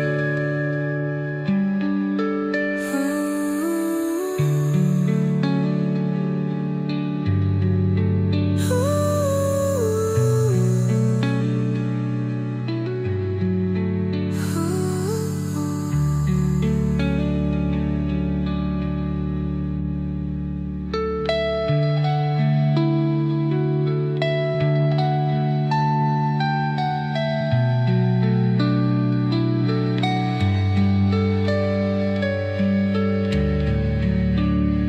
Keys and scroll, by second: 14.8 space, 18.6 Page_Down, 23.1 shift+Page_Down, 25.9 shift+Page_Down, 27.9 Page_Up.